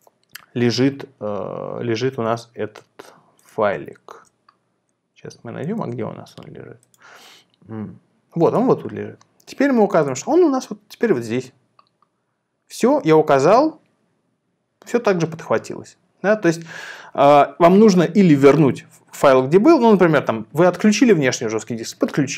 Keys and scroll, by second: 4.2 Down, 5.6 Down, 5.7 Down.